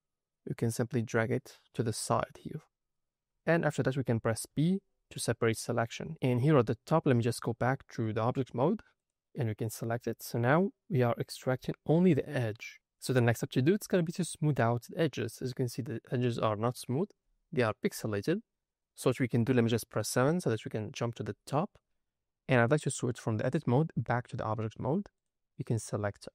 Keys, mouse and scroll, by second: 0.5 click, 2.1 shift+middle click, 2.6 scroll up 2, 3.4 scroll down 1, 3.5 scroll up 1, 4.4 p, 6.5-7.3 scroll up 3, 7.3-8.0 drag, 8.9 click, 9.4 middle click, 9.9 scroll up 2, 10.6-11.1 scroll down 3, 11.1 middle click, 11.6 shift+middle click, 14.6-16.9 scroll up 2, 16.9-17.7 scroll down 2, 17.7 scroll up 3, 18.3 scroll down 3, 20.0 KP_7, 21.0-22.7 scroll up 3, 23.4-24.3 drag, 25.1 click, 25.7 click.